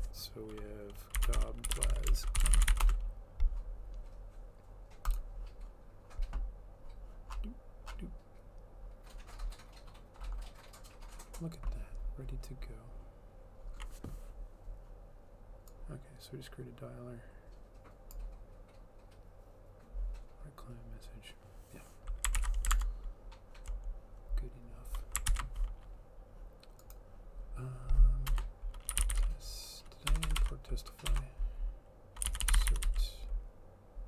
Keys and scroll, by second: 0.9-3.3 typing, 22.7 ctrl+c, 22.8 alt+Tab, 25.3 ctrl+v, 28.7-33.4 typing.